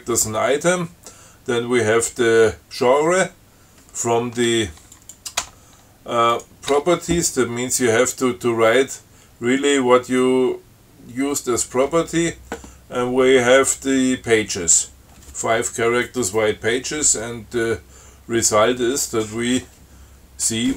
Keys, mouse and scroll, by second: 5.2 click, 6.6 click, 7.0 Tab.